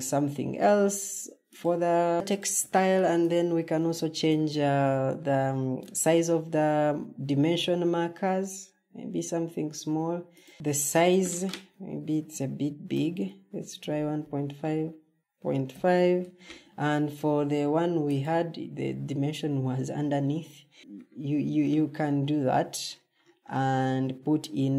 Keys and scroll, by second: 14.3-15.2 typing, 21.2 Escape, 23.3-24.7 typing.